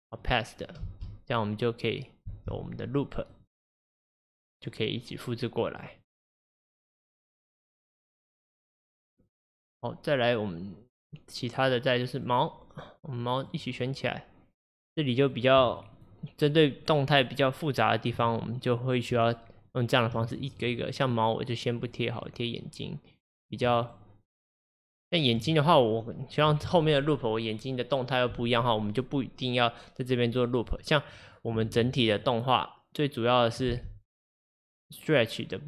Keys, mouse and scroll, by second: 0.9 space, 2.4 space, 3.4 click, 4.3-5.0 scroll up 2, 5.8 click, 7.8 click, 9.5 click, 12.2 click, 12.8-20.7 drag, 21.8 click, 23.5-25.0 drag, 25.1 shift+click, 32.3-33.7 drag, 33.7 space.